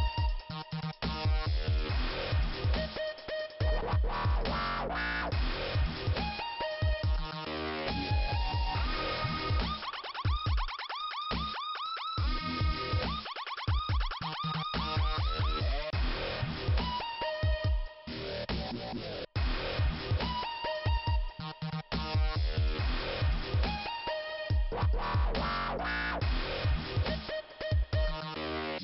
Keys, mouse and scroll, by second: 0.4 click, 2.5 click, 4.0 click, 6.3 click, 9.2 click, 11.2 click, 12.2 click, 12.9 right click, 14.3 click, 17.8 click, 18.3 right click, 19.0 click, 20.3 scroll up 2, 21.0 click, 21.7 click, 23.4 click, 23.9 click, 24.4 scroll down 3, 25.5 click, 26.6 click.